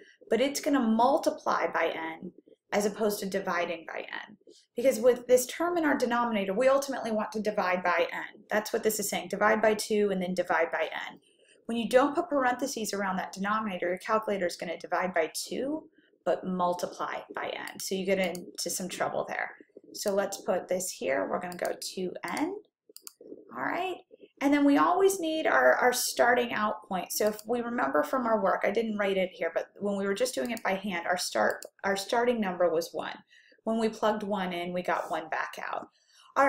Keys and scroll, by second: 18.0 Left, 18.9 Left, 20.0 (, 21.6 2, 22.4 x, 23.3 ), 27.4 Down, 30.7 1, 31.6 Return.